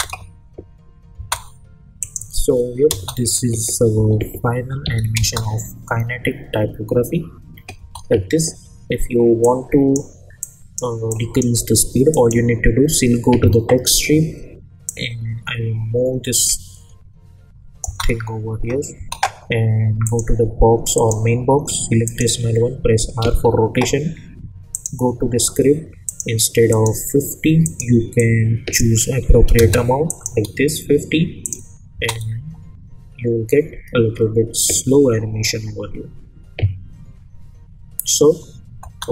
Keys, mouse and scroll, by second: 2.0 click, 2.9 space, 4.8 n, 5.2 space, 7.8 space, 9.4-10.0 drag, 14.8-18.0 drag, 17.8 space, 20.0 click, 23.2 r, 24.7-28.8 drag, 31.9 space, 38.8 space.